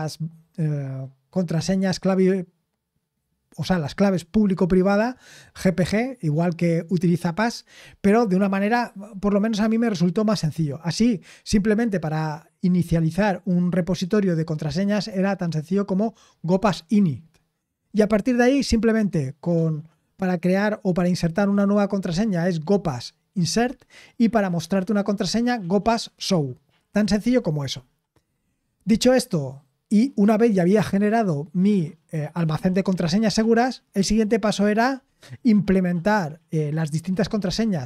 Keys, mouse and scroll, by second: 8.2-8.7 scroll down 1, 10.5 scroll down 2, 27.7 scroll down 3.